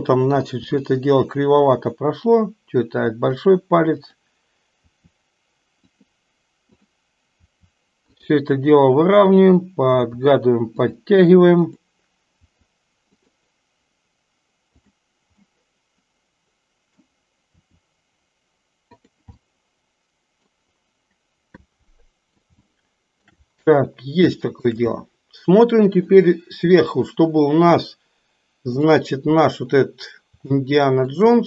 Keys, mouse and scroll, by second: 3.4 r, 3.9 click, 4.9 r, 7.6 r, 9.2 click, 10.0 r, 11.6 click, 12.4 r, 14.7 click, 15.4-17.0 middle drag, 17.4 r, 19.4-20.5 middle drag, 21.8 middle click, 22.7-23.4 shift+middle drag, 24.5 shift+middle click, 25.1-26.2 middle drag, 26.8-28.9 middle drag, 30.5 shift+middle click.